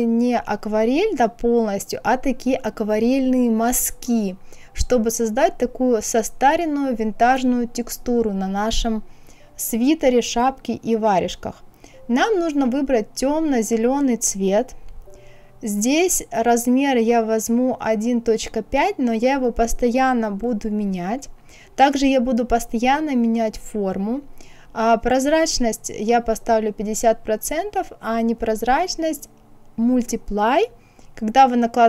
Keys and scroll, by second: 17.7 KP_1, 18.2 KP_Decimal, 19.0 KP_5, 24.5 KP_5, 24.8 KP_0.